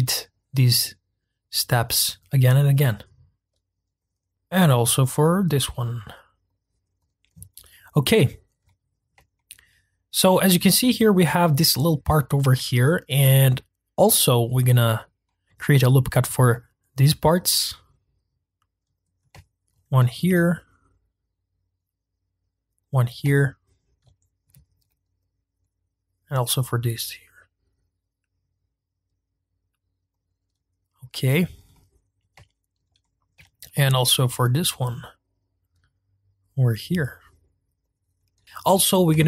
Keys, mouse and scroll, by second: 0.3 ctrl+z, 0.4 ctrl+r, 1.5 ctrl+r, 2.0 scroll down 1, 2.2 ctrl+r, 2.7 ctrl+r, 3.4 ctrl+r, 4.2 ctrl+r, 7.1 click, 7.5-11.2 middle drag, 11.2-11.6 scroll up 2, 11.6-16.2 middle drag, 16.2 ctrl+r, 19.3 shift+middle click, 20.1 ctrl+r, 23.3-24.6 shift+middle drag, 24.6 ctrl+r, 30.6-31.0 scroll down 2, 31.3-31.7 scroll up 2, 31.7-33.4 middle drag, 33.4 ctrl+r, 38.1 scroll down 1, 38.4-39.2 middle drag.